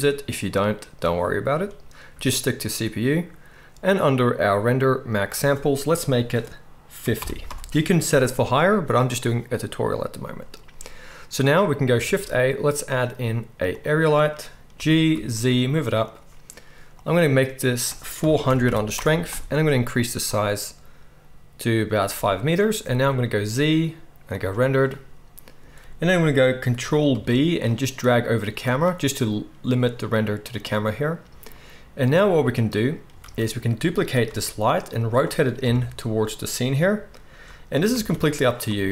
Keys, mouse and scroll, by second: 12.0 shift+a, 14.7 g, 16.1-17.6 drag, 17.6-26.6 middle drag, 18.6 0, 23.2 z, 27.0 ctrl+b, 33.2 shift+d, 34.0-38.9 right drag, 34.2 r, 35.6 KP_0, 37.9 shift+d.